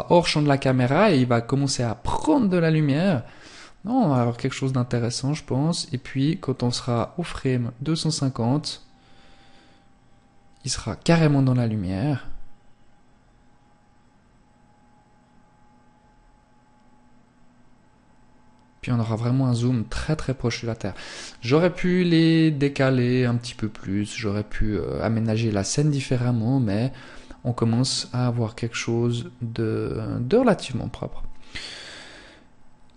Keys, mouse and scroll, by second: 2.0 click, 5.8 click.